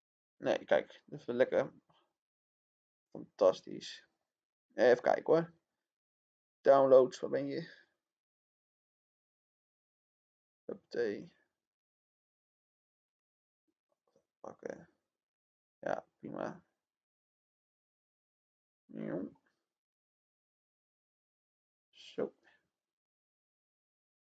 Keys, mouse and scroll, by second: 0.1 click, 23.3-24.3 drag.